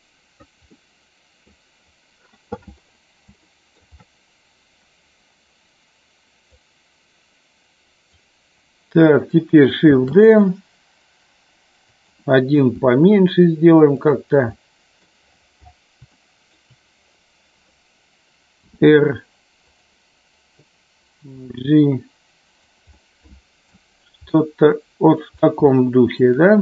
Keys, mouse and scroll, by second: 0.7 middle click, 3.4-3.8 shift+middle drag, 6.4-8.2 drag, 9.8 shift+d, 11.8 click, 12.7 s, 13.9 click, 14.4 scroll up 1, 14.7 middle click, 14.9 scroll down 1, 16.1 shift+scroll up 1, 16.3 shift+middle click, 21.3 g, 22.5 click, 22.9 middle click, 24.2 middle click, 25.7 shift+middle click, 26.4 middle click.